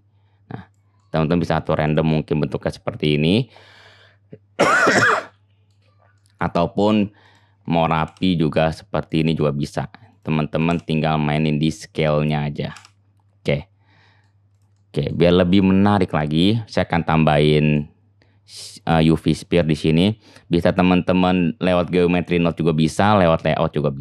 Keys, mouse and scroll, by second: 2.0-7.2 middle drag, 7.2-14.6 drag, 14.6-24.0 middle drag.